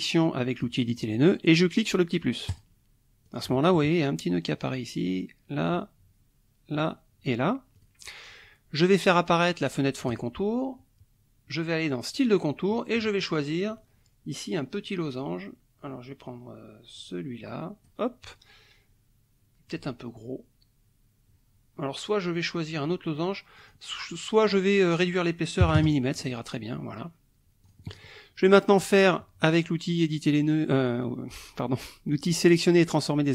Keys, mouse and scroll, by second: 2.5 click, 3.2 click, 4.5 click, 5.6 click, 6.7 click, 7.8 click, 10.1 click, 12.1 click, 13.2-18.1 drag, 23.6 click, 24.6 click, 25.6 KP_1, 25.8 KP_Enter, 27.6 click.